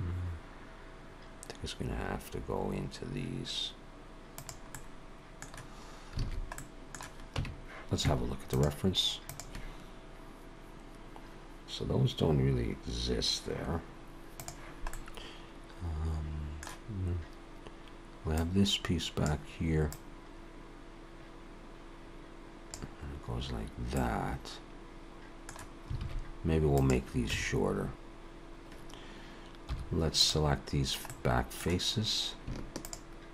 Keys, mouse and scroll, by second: 4.7 middle click, 6.2 alt+a, 6.6 middle click, 7.4 Tab, 14.9 middle click, 18.3 click, 19.9 click, 23.9 middle click, 26.0 alt+a, 26.7 click, 27.3 Tab, 29.7 3, 30.2 click, 31.1 middle click, 32.7 shift+click.